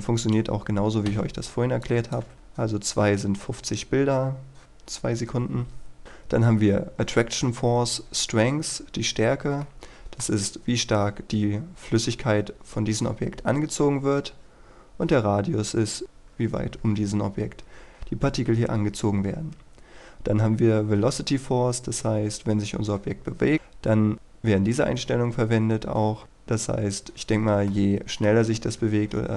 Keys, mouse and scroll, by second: 0.1 click, 1.0 KP_1, 1.7 click, 2.1 KP_2, 2.3 Return, 9.6 middle click, 21.6-29.3 middle drag.